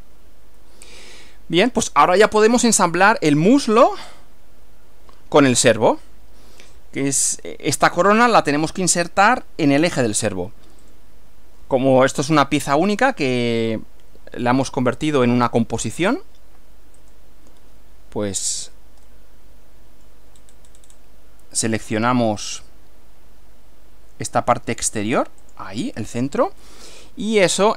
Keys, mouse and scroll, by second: 0.6-2.0 middle drag, 2.1-2.8 middle drag, 10.9 click, 17.0 click, 19.1-20.3 shift+middle drag, 20.4 shift+scroll down 1, 20.5-21.1 shift+scroll up 1, 25.5 click, 26.7-27.7 middle drag.